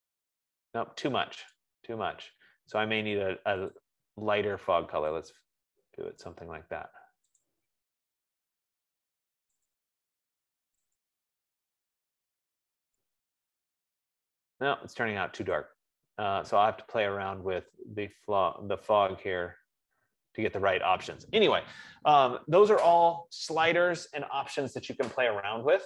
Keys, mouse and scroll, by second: 1.9 click, 4.3 click, 6.5 click, 7.9 click, 9.8 click, 11.4 click, 16.1 click, 16.8 F15.